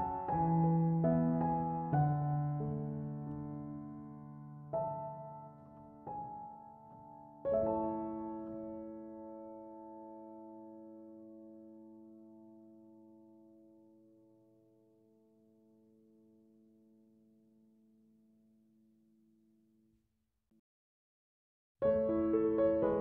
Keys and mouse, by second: 17.5 click.